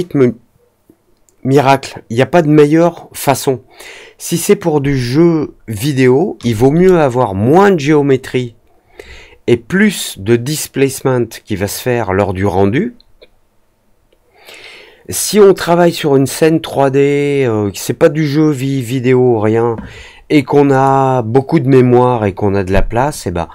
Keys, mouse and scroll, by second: 20.6 click, 23.0-23.5 drag.